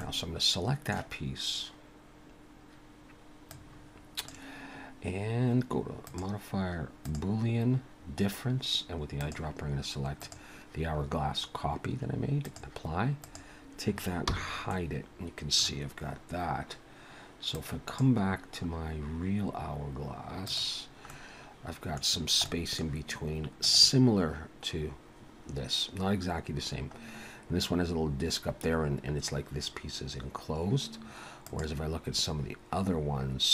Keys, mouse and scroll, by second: 0.0 middle click, 3.5 click, 6.1 click, 9.2 click, 12.5 click, 13.2 click, 14.3 h, 14.7 middle click, 17.5 click, 18.2-19.4 scroll down 5, 20.5 click, 21.1 middle click, 22.1-22.5 scroll down 2, 22.5 middle click.